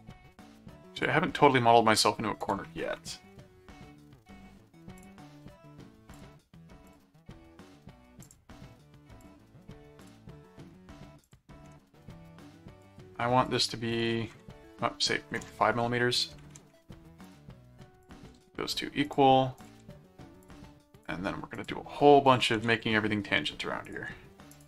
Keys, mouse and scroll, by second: 0.9 click, 2.4 click, 5.0 click, 6.1 click, 6.9 click, 8.2 click, 9.2 click, 10.0 click, 11.2 click, 12.8 right click, 13.4 click, 17.2 ctrl+click, 18.0 ctrl+alt+click, 18.4 ctrl+alt+q, 19.0 click, 20.4-21.5 drag, 21.6 ctrl+click, 22.2 ctrl+alt+click, 22.6 ctrl+alt+a, 23.8 ctrl+click, 24.5 ctrl+alt+click.